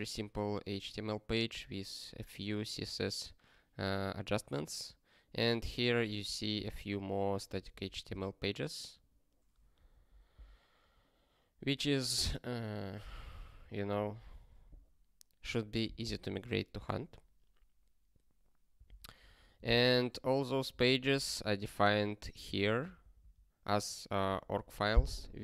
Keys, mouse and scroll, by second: 20.8 ctrl+n, 20.9 ctrl+n, 21.6 Return, 22.6 ctrl+p.